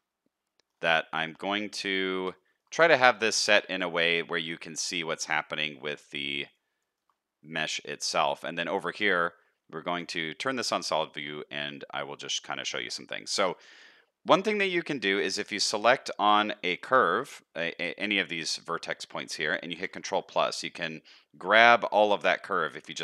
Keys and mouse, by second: 0.4 shift+click, 1.4 Tab, 2.4 shift+click, 2.9 click, 3.4 shift+drag, 6.8 shift+middle click, 8.1 Tab, 9.4 z, 10.3 shift+middle click, 11.0 shift+middle click, 11.5 middle click, 13.2 shift+middle click, 15.3 shift+middle click, 16.5 middle click.